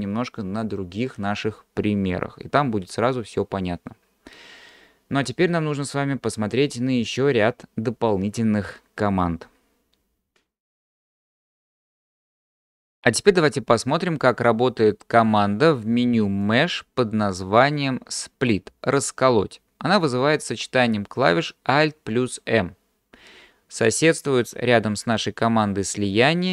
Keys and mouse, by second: 16.5-26.5 drag.